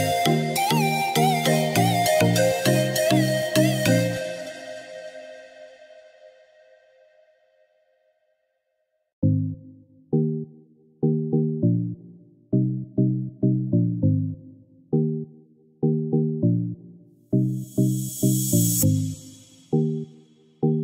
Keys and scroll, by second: 3.2 ctrl+k.